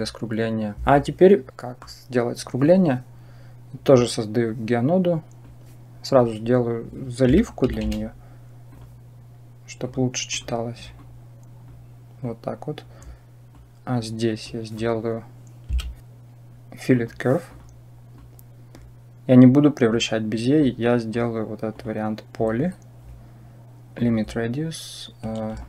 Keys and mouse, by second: 1.5 middle click, 5.3-9.7 drag, 10.1 click, 10.8 click, 12.0 click, 13.3 click, 14.2-17.3 drag, 18.0 click, 18.2-18.6 drag, 19.2 click, 20.4 click, 21.6 click, 23.8 click, 25.4-25.6 shift+drag.